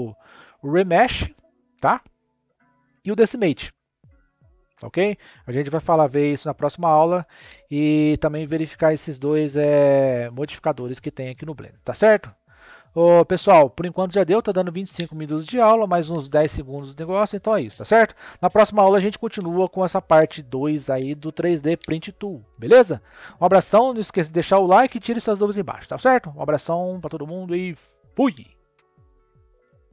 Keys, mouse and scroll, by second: 11.7 click, 12.1-13.0 scroll up 6.